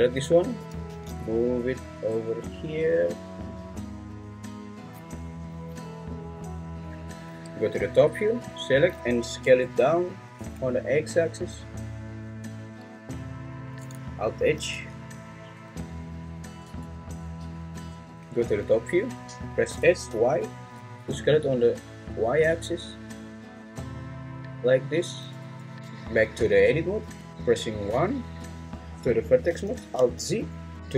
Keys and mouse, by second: 0.6 g, 0.9 z, 2.6 click, 7.2 `, 9.4 Tab, 10.4 a, 15.7 `, 16.6 Tab, 18.2 `, 19.7 s, 20.1 y, 25.1 click, 25.4 `, 25.7 Tab, 25.7 `, 28.0 1, 30.0 alt+z.